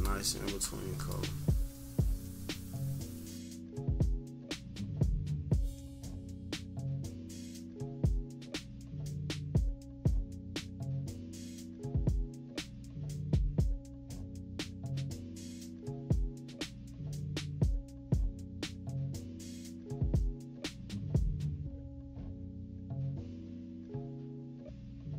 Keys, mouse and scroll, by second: 1.0-3.8 drag, 4.1 click, 4.3 -, 4.4 =, 4.7-6.8 drag, 7.0 -, 7.2 -, 7.3 =, 7.4 scroll down 1, 7.6 =, 7.8-9.4 drag, 9.4 -, 9.5 =, 9.6 scroll up 1, 10.0 click, 11.5 click, 12.5 -, 12.6 =, 12.8 scroll down 1, 13.0 scroll up 1, 13.0 =, 13.2-16.3 drag, 16.4 -, 16.6 =, 16.7 click, 17.0 -, 17.0 scroll down 1, 17.0 =, 17.1 scroll up 2, 17.3-19.0 drag, 19.1 -, 19.3 -, 19.5 scroll down 2, 19.5 =, 19.7 scroll up 2, 20.1-22.2 drag, 22.2 -, 22.5 =, 22.6 scroll down 1, 22.8-24.3 drag, 24.3 -, 24.5 scroll up 1, 24.5 =, 24.8-25.1 drag.